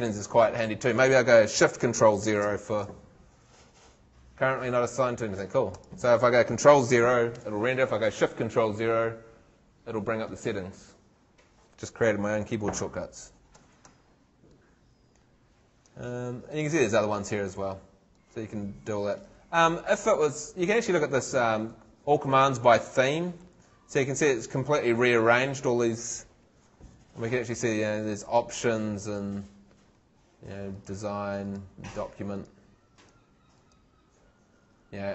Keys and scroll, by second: 2.4 ctrl+shift+0.